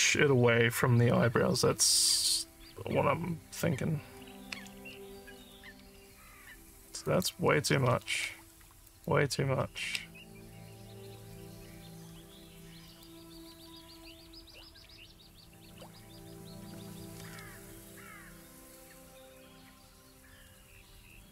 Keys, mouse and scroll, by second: 7.1 click, 8.9 click, 12.9 click, 17.9-20.5 alt+drag, 20.8 alt+middle click.